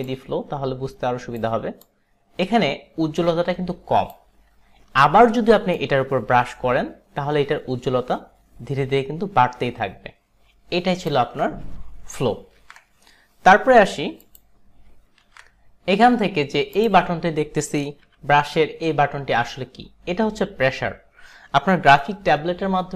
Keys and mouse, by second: 0.1 click, 1.9 click, 5.8 click, 12.2 ctrl+s, 12.7 ctrl+d, 13.3 ctrl+d, 14.3 click, 15.2 ctrl+d, 16.8 click, 18.1 b.